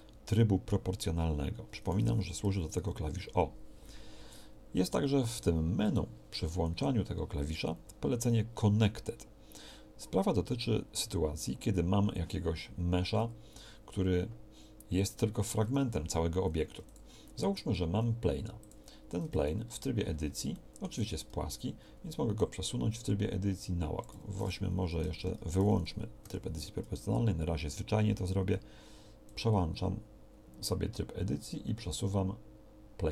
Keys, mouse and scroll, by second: 2.4 o, 2.8 o, 15.5 Tab, 16.8 x, 17.6 shift+a, 19.2 Tab, 22.8-24.0 drag, 24.2 Escape, 25.2 ctrl+z, 26.2 o, 29.4-33.1 drag.